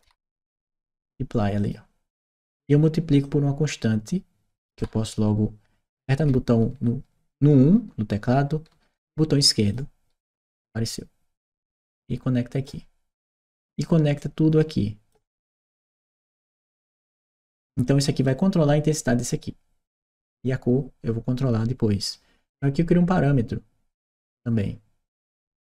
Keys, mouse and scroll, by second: 1.4 click, 3.0-4.5 drag, 5.1 Escape, 9.4 click, 11.2-12.4 drag, 14.0 click, 17.6 click, 19.8 right click, 22.3 right click, 25.0 click.